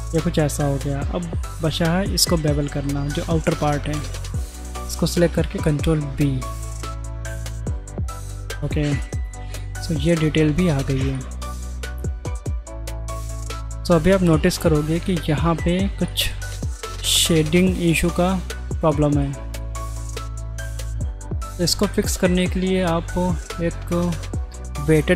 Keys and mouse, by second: 0.6 middle click, 1.6 2, 2.1 alt+click, 3.5 middle click, 5.2 ctrl+b, 6.6 ctrl+v, 7.8 Tab, 8.1 middle click, 8.7 middle click, 9.6 middle click, 11.1-12.5 middle drag, 12.9 middle click, 14.0 shift+middle drag, 16.1 middle click, 17.3-18.0 middle drag, 18.9 middle click, 19.6 middle click, 20.9-21.4 middle drag, 22.0 shift+middle click, 23.5-25.1 right drag.